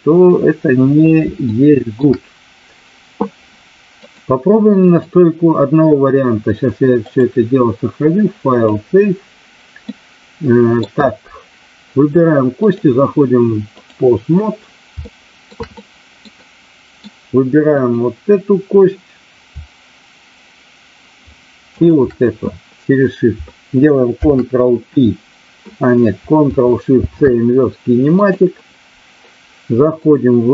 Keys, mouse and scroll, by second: 1.4-2.0 shift+middle drag, 4.1 click, 4.8 click, 7.0-8.7 drag, 9.9-10.8 middle drag, 12.8-13.9 drag, 15.0-15.4 shift+middle drag, 15.7-16.3 middle drag, 16.4 middle click, 17.7 click, 21.7 shift+click.